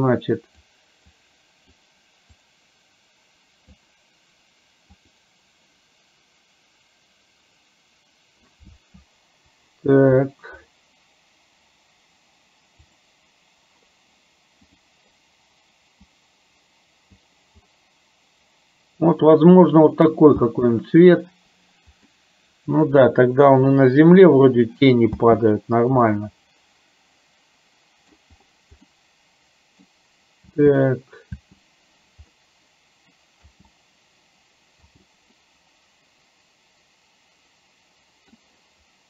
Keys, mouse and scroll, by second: 12.9 click, 14.8 click, 17.8-20.7 middle drag, 20.7 space, 22.3 middle click, 25.4 space, 26.1-28.2 middle drag, 29.1 middle click, 30.5 space, 31.5 space, 32.4 middle click, 33.5 space, 34.9 space, 35.5-38.5 middle drag.